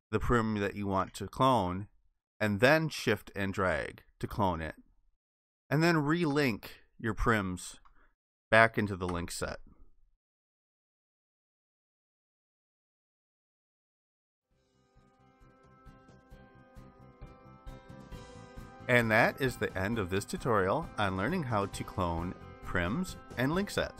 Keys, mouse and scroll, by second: 2.8 shift+click, 6.6 shift+click, 9.1 ctrl+i.